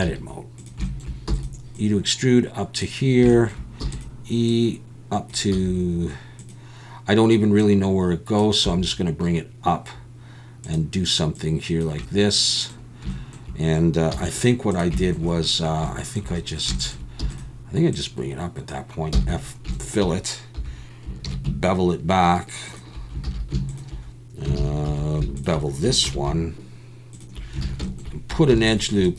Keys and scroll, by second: 0.0 s, 1.3 e, 3.8 e, 5.5 s, 8.8 s, 14.1 z, 18.1 e, 19.1 f, 20.6 3, 21.3 ctrl+b, 23.3 alt+a, 24.6 alt+a, 24.9 2, 26.1 ctrl+b, 27.6 alt+a, 28.5 ctrl+r.